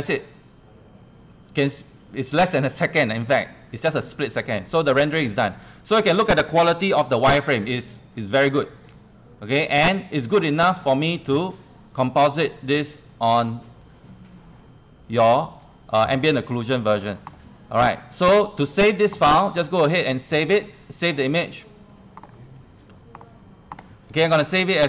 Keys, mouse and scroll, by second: 7.0 ctrl+1, 7.2 ctrl+1, 7.4 scroll up 1, 7.9 scroll down 1, 9.3 scroll down 1, 10.0 right click, 10.5 right click, 15.1 click, 16.5 scroll down 1, 17.9 click, 19.3 click.